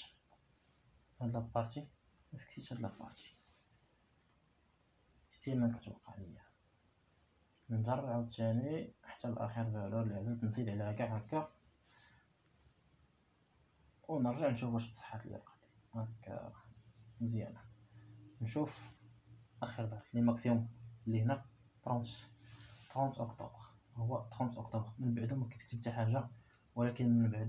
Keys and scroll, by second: 1.4 F4, 3.6 Return.